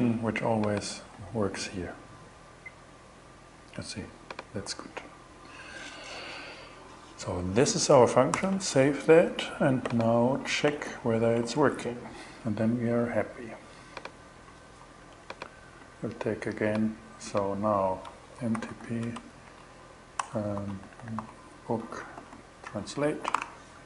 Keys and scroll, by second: 7.8 super+s, 11.0 super+Tab, 14.4 super+BackSpace, 17.6-21.6 typing, 22.1 shift+Return, 22.7 alt+5, 22.8 alt+6, 23.3 alt+shift+6, 23.4 alt+shift+Return.